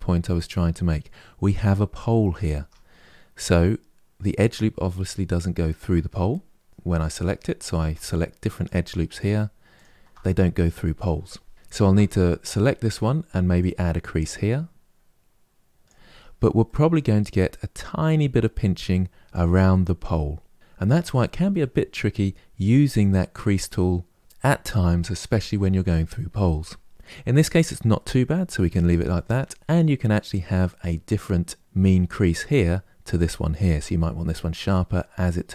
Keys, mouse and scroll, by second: 2.3 Tab, 2.7-3.8 scroll up 2, 6.7 alt+click, 7.6 alt+click, 8.3 alt+click, 8.9 alt+click, 9.5 alt+click, 11.5 alt+click, 13.3-15.8 drag, 15.8 Tab, 16.3-19.4 middle drag, 20.3 scroll down 2, 20.5-23.6 middle drag, 27.7-30.7 middle drag.